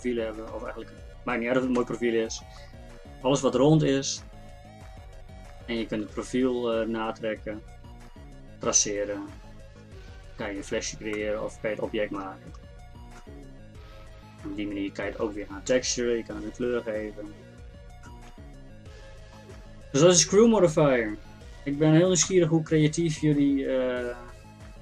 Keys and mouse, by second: 0.9 middle click, 1.8 KP_1, 5.4-11.6 middle drag, 15.2-18.1 middle drag, 22.3 KP_1.